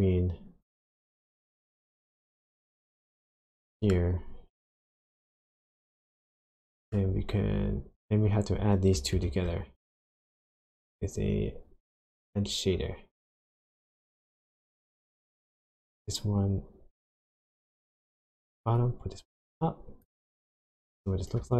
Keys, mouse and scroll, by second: 0.6 click, 2.0 click, 2.5-3.2 scroll up 4, 3.2 middle click, 4.8 click, 5.9 scroll down 1, 6.5 shift+middle click, 9.1 shift+a, 15.8 click, 18.7 click, 20.8 ctrl+shift+click.